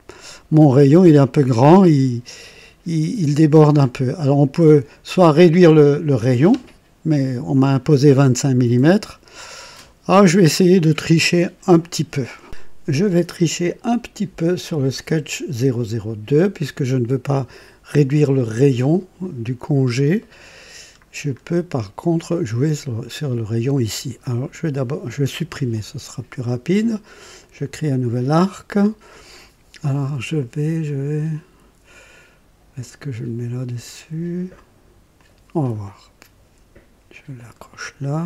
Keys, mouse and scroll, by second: 3.9-4.3 scroll down 2, 18.0 click, 19.5-19.9 scroll up 3, 20.1-20.9 right drag, 20.9 scroll down 1, 24.4 click, 25.3 Delete, 27.3 click, 35.0 click, 37.2 click.